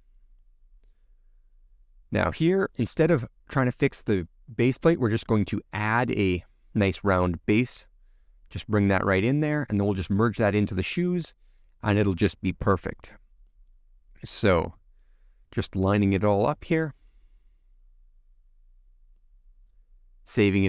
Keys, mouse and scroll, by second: 0.6 click, 0.8 middle click, 1.1-5.7 scroll down 3, 5.9 scroll down 1, 6.0 click, 6.5 ctrl+z, 6.8 click, 7.3 click, 7.8 scroll up 10, 8.0 click, 9.0 middle click, 10.1 scroll down 1, 10.2-11.3 middle drag, 11.3 ctrl+alt+F6, 11.4 middle click, 11.8-12.4 scroll up 4, 13.4 click, 13.9-15.2 middle drag, 15.2-15.6 scroll down 7, 15.6-17.0 middle drag, 17.0 click, 17.7 click, 18.3 middle click, 18.5-20.4 scroll up 4, 20.4 click.